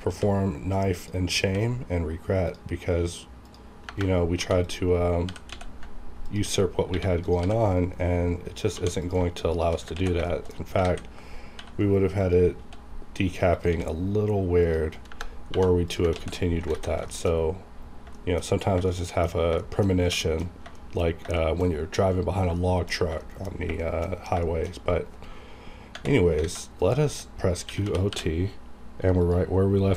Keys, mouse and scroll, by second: 0.1 c, 1.0 click, 1.5 c, 2.5 click, 3.9 KP_Enter, 4.4 2, 4.6 click, 4.7 click, 5.3 g, 5.5 x, 6.2 ctrl+click, 6.6-6.9 scroll up 1, 7.1 1, 7.3 click, 7.4 g, 7.6 right click, 7.7 right click, 8.0 scroll down 1, 8.7 2, 9.0 click, 9.0 click, 9.5 shift+click, 9.9 ctrl+x, 10.3 shift+middle click, 10.8 alt+a, 11.6 k, 12.2 click, 12.5 c, 13.5 click, 13.7 c, 14.6 click, 15.0 KP_Enter, 15.5 2, 15.9 click, 16.1 ctrl+x, 16.5 scroll down 2, 16.7 alt+a, 17.1 shift+middle click, 17.2 shift+scroll down 2, 17.4-18.0 scroll up 2, 18.1 shift+middle click, 18.9 shift+middle click, 19.6 shift+middle click, 20.2 shift+middle click, 20.4 scroll down 3, 20.8 shift+middle click, 21.4 shift+middle click, 22.6 shift+middle click, 23.0 scroll down 1, 23.2 shift+middle click, 23.8 shift+middle click, 24.4 shift+middle click, 26.4 alt+a, 26.8 click, 26.8 click, 27.7-28.1 typing, 29.2 click, 29.8 scroll down 1.